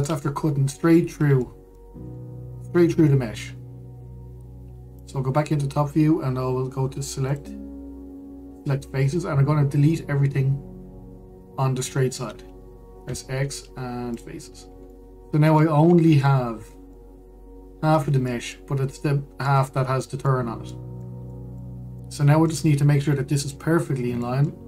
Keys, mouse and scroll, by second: 0.0-0.5 scroll up 1, 0.5 shift+middle click, 1.1 scroll up 1, 1.4-2.6 middle drag, 2.6-3.9 scroll up 2, 3.9-5.6 scroll down 2, 5.6 click, 6.2-7.9 scroll up 2, 7.9-9.8 drag, 13.7 x, 15.3-15.6 scroll down 2, 15.6 middle click, 16.5-16.9 scroll up 2, 16.9-24.5 middle drag, 24.5-24.6 scroll down 2.